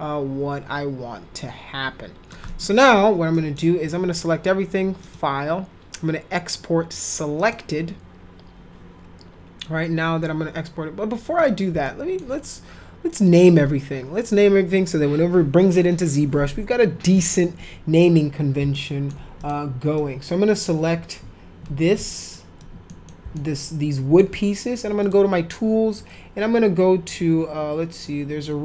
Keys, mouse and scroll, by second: 2.4 middle click, 3.3 middle click, 5.0 click, 7.4 click, 11.4 click, 11.8 alt+middle click, 13.3 click, 18.7 alt+middle click, 19.4 click, 20.0 click, 22.3 ctrl+click, 22.9 middle click, 23.3 alt+middle click, 25.0 click.